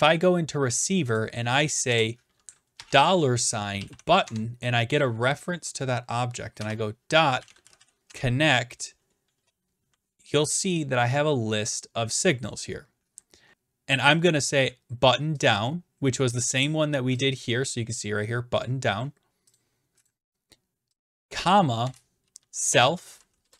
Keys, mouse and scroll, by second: 1.2 click, 1.9 Return, 2.7-4.3 typing, 6.6-8.6 typing, 11.0-13.5 scroll, 15.4 click, 15.5 click, 17.2 click, 19.6 click, 20.1 click, 21.0 click, 21.9-23.5 typing.